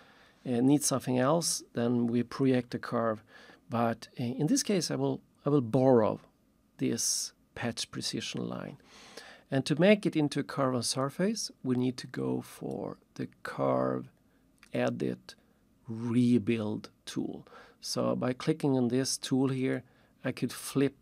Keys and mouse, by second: 12.1 click, 12.7 click, 14.7 click, 19.6 click.